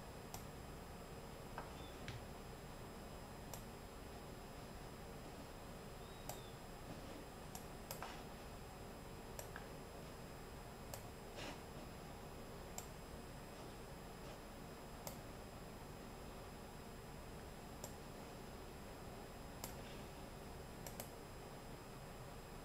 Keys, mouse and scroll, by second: 3.9-5.4 middle drag, 7.6 click, 9.3 middle click, 11.1 middle click, 13.7 middle click, 14.3 click, 15.0 middle click, 18.2-19.7 middle drag, 21.4-22.6 middle drag.